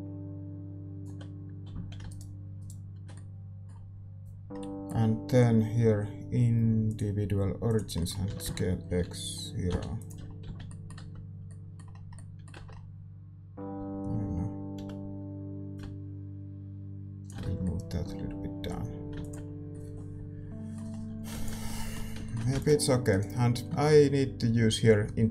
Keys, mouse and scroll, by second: 1.7 z, 2.0-4.5 right drag, 3.1-7.7 middle drag, 7.7-9.6 drag, 7.9-9.9 middle drag, 8.3 s, 10.2-14.7 middle drag, 10.4 z, 10.9 Tab, 12.5 Tab, 13.7 a, 14.7 l, 15.7-17.6 drag, 17.4 Tab, 19.4 ctrl+s, 20.9-23.1 middle drag, 21.6 ctrl+s, 23.1 ctrl+s, 23.1-25.3 drag, 23.1-25.3 right drag.